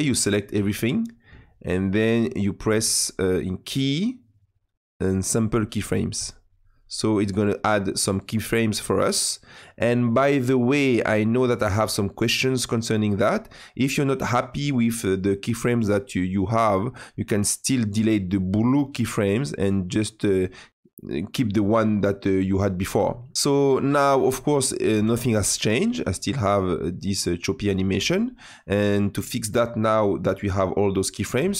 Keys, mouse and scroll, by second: 16.8 click, 17.8-21.7 drag, 23.8-27.1 drag, 27.1 space, 28.2 space, 28.3 click, 29.3 click.